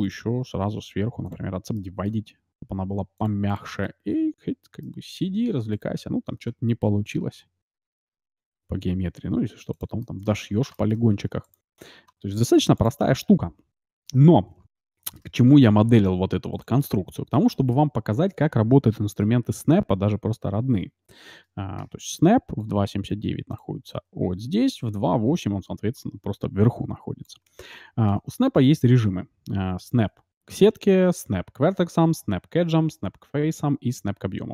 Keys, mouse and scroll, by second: 0.0-1.6 drag, 1.7-3.4 middle drag, 3.1-5.3 drag, 3.8-6.4 middle drag, 5.7-7.4 right drag, 6.8 g, 10.0-12.3 middle drag, 11.4-13.0 right drag, 12.3 e, 13.0 Tab, 13.2-19.2 middle drag, 15.9 s, 28.5-30.2 drag.